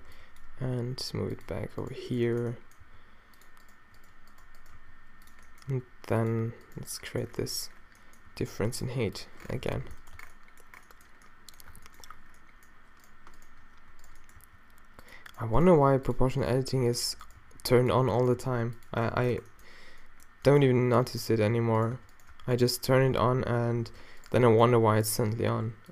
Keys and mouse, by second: 0.2 b, 0.7 d, 2.8 a, 2.8 g, 4.8 g, 5.7 r, 8.3 r, 8.8 s, 9.7 o, 10.2 Tab, 11.7 Tab, 14.4 g, 15.8 g, 16.6 g, 17.4 g, 18.4 g, 20.7 Tab, 21.6 Tab, 22.0 Tab, 22.3 Tab, 24.9 z, 25.4 e.